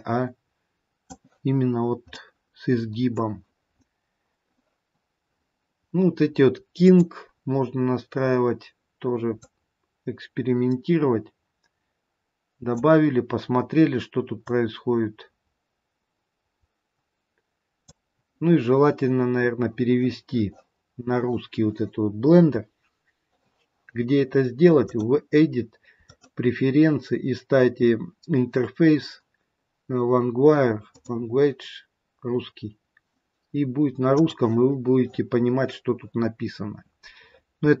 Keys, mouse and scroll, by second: 2.2 middle click, 6.7 click, 7.3-7.7 scroll down 2, 8.1-9.4 scroll down 3, 9.4 click, 9.4-9.8 scroll down 3, 14.3 click, 24.7 click, 36.3-37.2 scroll up 1, 37.2-37.8 scroll up 6.